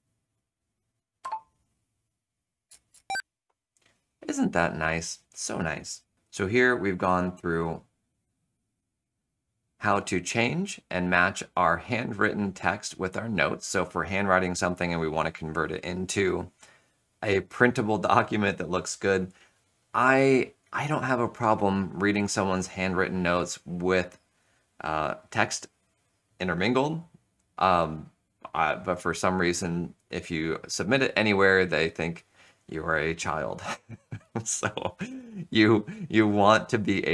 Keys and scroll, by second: 2.6 Return, 2.8 Return.